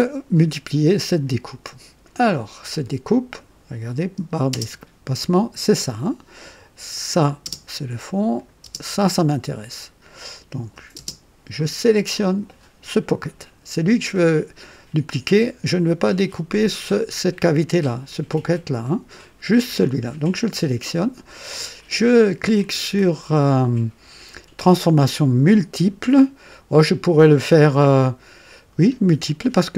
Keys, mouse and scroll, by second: 3.3 click, 4.7 space, 6.9 click, 7.4 space, 8.3 click, 8.7 space, 10.1 click, 11.2 space, 12.1 click.